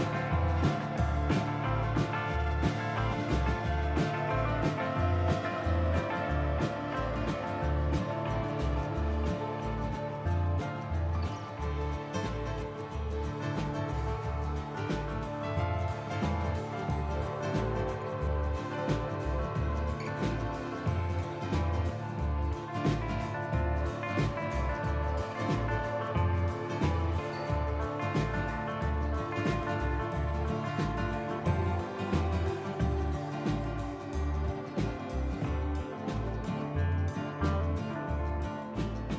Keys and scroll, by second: 2.3 i, 7.4 Delete, 9.9 ctrl+r, 15.3 ctrl+r, 19.2 Tab, 25.4 KP_Divide.